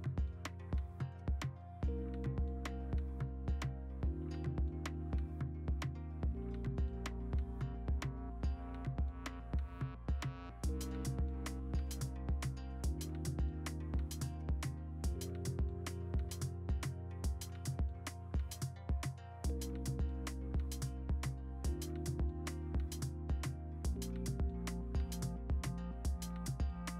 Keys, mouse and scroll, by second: 5.7 ctrl+z, 6.8 ctrl+z, 6.9 ctrl+alt+g, 6.9 alt+f, 7.4 ctrl+d, 9.9 v, 17.4 v, 19.5 v.